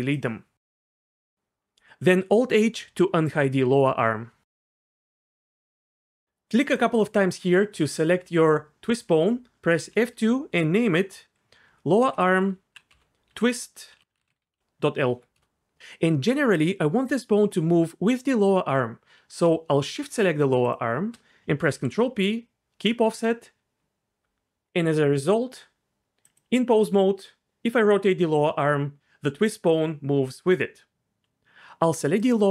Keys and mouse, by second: 0.2 x, 2.8 alt+h, 6.1 click, 6.6 click, 6.7 click, 9.8 F2, 12.1 BackSpace, 12.3 BackSpace, 12.5 BackSpace, 12.6 BackSpace, 14.1 BackSpace, 21.7 ctrl+p, 24.2 Tab, 26.2 click, 26.8 r, 26.9 r, 30.9 ctrl+z, 32.2 click.